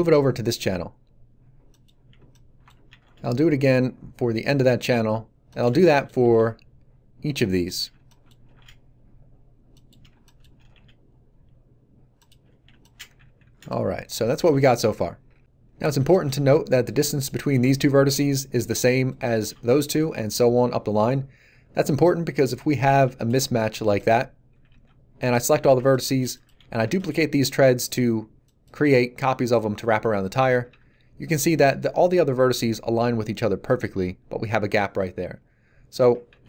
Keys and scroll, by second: 2.8 shift+d, 6.2 shift+d, 13.0 a, 23.0 g, 24.5 a, 26.8 shift+d, 30.6 a, 36.3 ctrl+z.